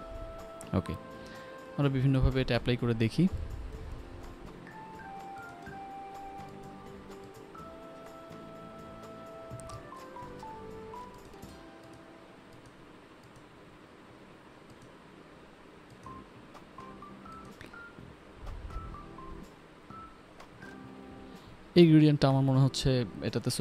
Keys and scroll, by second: 1.7 ctrl+], 4.2 ctrl+z, 6.8 ctrl+d, 8.1 ctrl+alt+z, 8.3 ctrl+alt+d, 8.4 1, 8.5 Return, 8.6 ctrl+alt+d, 8.7 Return, 8.7 2, 10.1 ctrl+BackSpace, 10.3 ctrl+alt+z, 10.5 ctrl+BackSpace, 10.7 ctrl+d, 12.5 ctrl+alt+z, 12.8 ctrl+m, 13.1 Escape, 13.3 g, 14.9 ctrl+alt+z, 16.3 ctrl+z, 21.5 p, 22.5 u, 22.7 ctrl+s, 22.9 p.